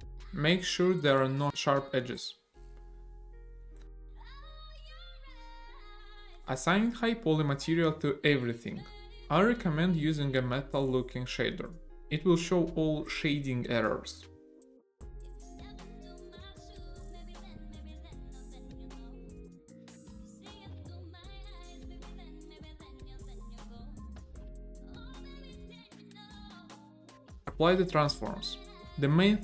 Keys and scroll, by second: 0.2 w, 0.8 Tab, 1.9 a, 3.2 ctrl+e, 4.9 Tab, 6.1 a, 12.1-13.7 typing, 14.0 Return, 17.0 BackSpace, 17.2 5, 17.3 Return, 19.6 BackSpace, 19.8 5, 19.9 Return, 21.3 a, 23.6 ctrl+l, 24.9 a.